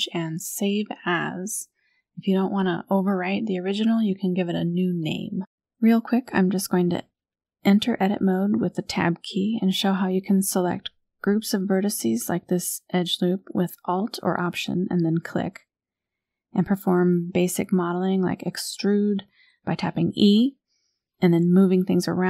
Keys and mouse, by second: 0.0 click, 3.0 n, 3.9 Tab, 5.1 click, 7.3 2, 8.3 alt+click, 9.1 KP_1, 11.1 click, 11.9 shift+click, 12.3 g, 13.6 g, 18.5 click, 19.0 click, 19.6 click, 21.3 shift+middle click, 21.6 click.